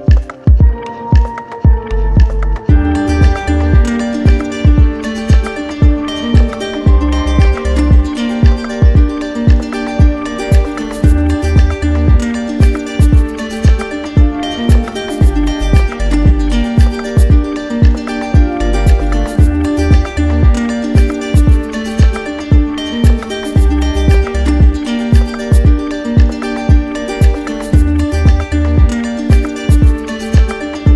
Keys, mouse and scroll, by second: 0.2 click, 3.3 click, 4.3 click, 5.4-6.5 drag, 24.8 click, 25.2 shift+click, 26.0 alt+click, 27.0 alt+click, 30.0 click, 30.4 shift+click.